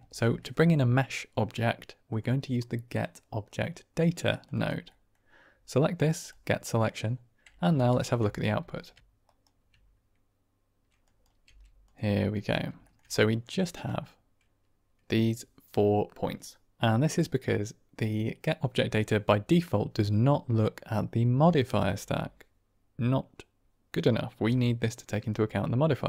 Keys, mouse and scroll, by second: 4.8 click, 6.2 click, 7.9 ctrl+shift+click, 9.2 ctrl+right click, 11.0 drag, 11.3 g, 12.7 shift+drag, 13.1 drag, 13.5 shift+click.